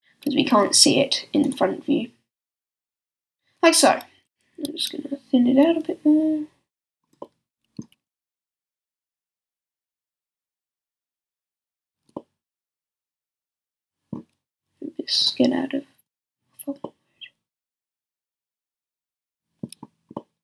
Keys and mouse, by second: 4.2-6.8 middle drag, 4.2 s, 6.8-11.1 drag, 7.9 s, 11.1 middle click, 12.9 click, 14.4 middle click, 16.8 middle click, 18.8-20.4 middle drag.